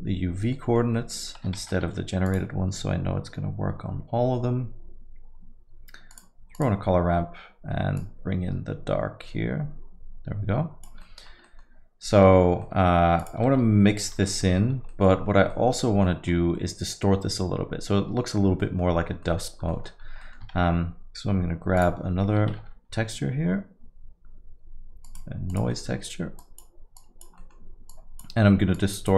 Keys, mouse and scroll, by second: 0.5 middle click, 0.9 middle click, 1.3 scroll up 2, 1.6 shift+a, 7.0-8.0 scroll up 1, 8.0 click, 8.0-10.0 scroll up 1, 11.0 middle click, 11.2 scroll down 3, 11.4 middle click, 11.8 scroll down 1, 12.1 middle click, 12.4 scroll down 2, 12.6 middle click, 13.2 click, 14.2 ctrl+x, 14.4 middle click, 14.7 scroll up 3, 14.9 middle click, 15.5 middle click, 15.8 scroll down 2, 16.0 middle click, 18.6 middle click, 19.7 middle click, 20.0-20.4 scroll up 2, 20.2 middle click, 20.6 shift+a, 22.6 shift+a, 25.7 middle click, 25.9-26.4 scroll down 2, 26.4 click, 27.0 click, 27.4 middle click, 28.0 click, 28.8 click.